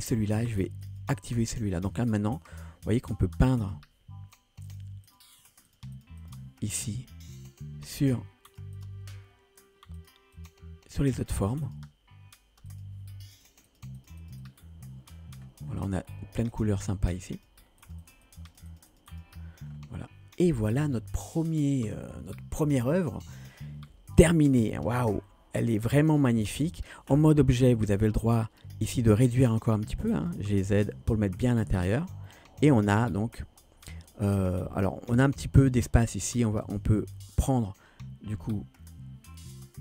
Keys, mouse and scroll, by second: 2.1 click, 3.6 click, 4.7 click, 5.1 click, 5.5 click, 5.7 click, 6.0 click, 6.3 click, 7.0 scroll down 2, 7.9 click, 8.5 click, 8.8 click, 10.0 click, 10.4 click, 10.9 click, 11.3 click, 11.5 click, 11.7 click, 12.7 click, 13.4 click, 13.7 click, 14.0 click, 14.3 click, 14.5 click, 15.2-15.7 scroll down 2, 16.5 click, 16.5 scroll down 2, 17.4 click, 17.9 click, 18.1 click, 18.3 click, 18.5 click, 18.8 click, 19.0 click, 19.1 click, 19.8 scroll down 1, 26.1-27.0 drag, 27.8 click, 29.3 s, 30.7 g, 32.4-35.2 middle drag, 35.5-36.0 scroll up 1, 36.0 middle drag, 36.7 Tab.